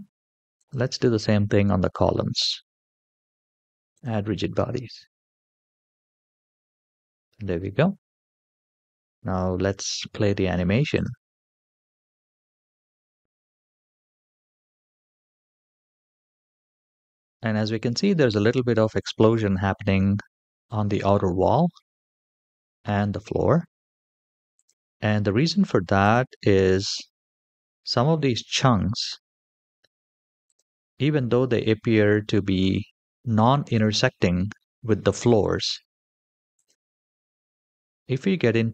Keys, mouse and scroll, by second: 1.0 click, 1.8-3.5 scroll down 3, 3.7 click, 5.9-6.7 scroll up 3, 10.7 click, 24.5 click, 25.8 click, 27.2-27.9 middle drag, 28.3 shift+middle click, 29.5-29.9 middle drag, 30.2 click, 30.8-31.3 middle drag, 31.9 g, 36.8-37.7 middle drag.